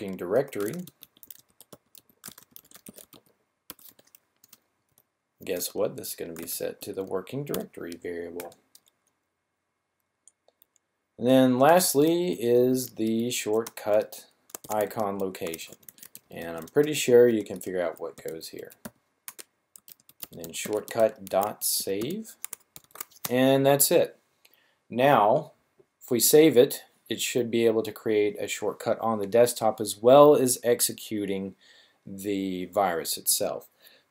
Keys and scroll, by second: 0.0-3.8 typing, 4.8 typing, 5.9-7.4 typing, 11.4-22.7 typing.